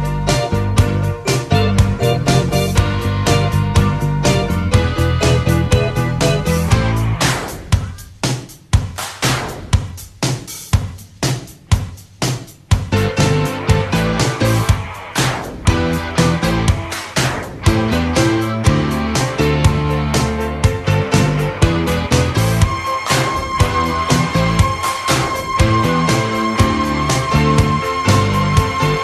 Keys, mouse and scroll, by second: 6.6 alt+a, 9.0 Escape, 14.1 alt+d, 22.4 shift+r, 24.5-29.0 typing, 25.0 alt+d, 25.9 alt+d, 26.5 alt+d, 27.1 alt+d.